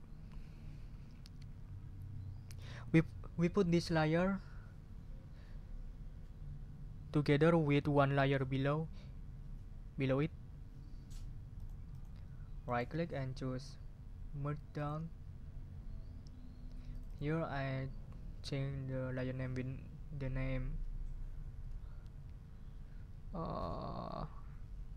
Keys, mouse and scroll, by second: 11.5 click, 11.9 click, 12.6 right click, 14.8 click, 16.9 click.